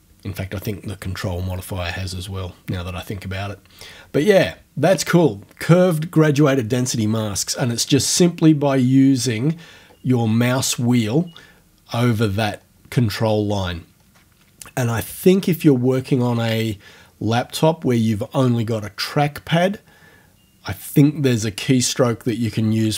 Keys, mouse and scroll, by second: 9.9 scroll down 2, 10.1 scroll up 2, 10.5-10.9 scroll down 2, 11.1-11.8 scroll up 2, 11.8 scroll up 1, 11.9-12.8 scroll down 4, 13.5-14.3 scroll down 4.